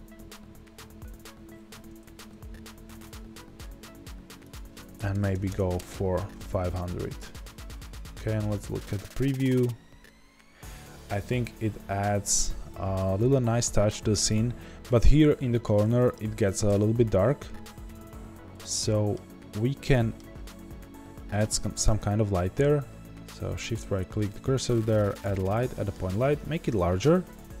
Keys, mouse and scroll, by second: 0.2 click, 1.7 g, 3.1 click, 5.7-18.8 drag, 5.7 KP_0, 5.8 KP_Enter, 7.4-7.8 scroll down 2, 7.8 z, 17.1-18.1 scroll up 2, 18.1 z, 18.8-21.9 middle drag, 19.3-19.9 scroll up 2, 20.9 scroll up 1, 21.9 shift+right click, 22.4 scroll down 1, 22.5 middle click, 23.3-27.6 middle drag, 25.2 shift+a.